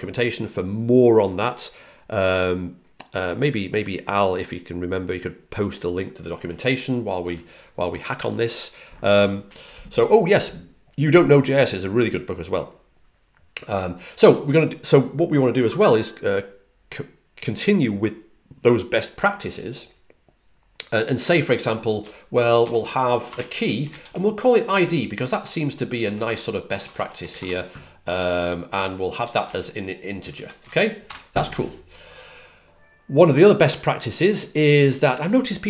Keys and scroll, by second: 21.6-24.3 typing, 29.9-31.0 typing.